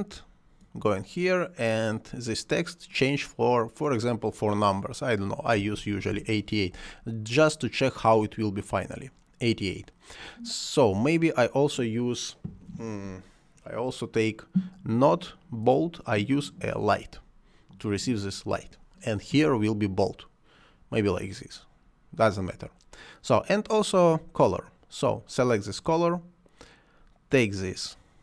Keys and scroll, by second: 5.6 8, 6.1 Return.